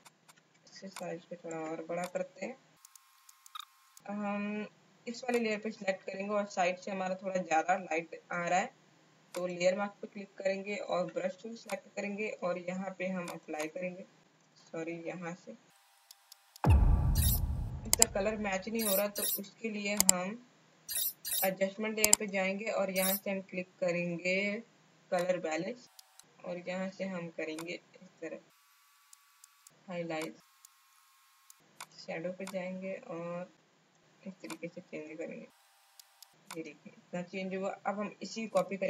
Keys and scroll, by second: 3.5 space, 10.8 b, 11.5 alt+b, 12.8 alt+x, 14.4 ctrl+z, 15.7 b, 16.6 space, 17.4 space.